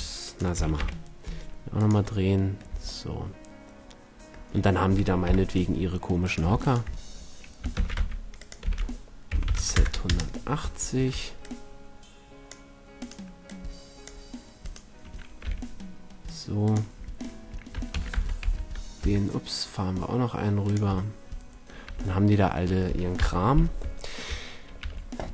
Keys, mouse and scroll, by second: 0.4-1.9 right drag, 0.5 r, 2.3-3.7 drag, 2.7 a, 5.3 KP_7, 7.7 shift+d, 8.6 r, 15.4 middle click, 15.5 g, 17.9 shift+d, 20.9-22.3 drag, 21.9 a, 23.2 KP_1, 23.3-24.3 drag, 24.8 a, 25.1 middle drag.